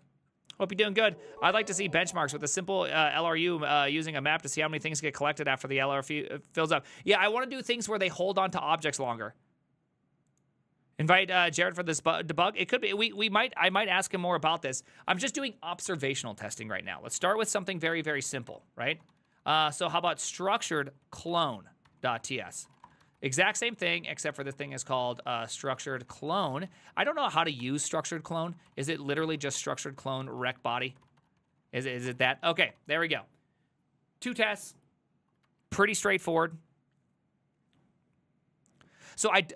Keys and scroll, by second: 16.0 alt+{, 17.0 ctrl+c, 17.2 ctrl+:, 17.3-33.5 typing, 17.3 Return, 35.5 alt++.